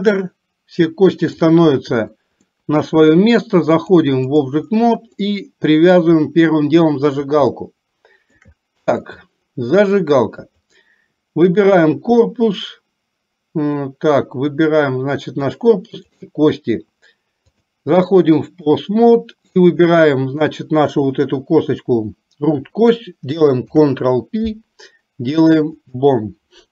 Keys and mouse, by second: 0.3-1.5 middle drag, 2.6 middle click, 3.9 click, 5.3 middle click, 7.6 shift+middle click, 9.1 middle click, 10.5 click, 16.0 shift+click, 17.8-19.0 drag, 19.8 click, 23.8 ctrl+p.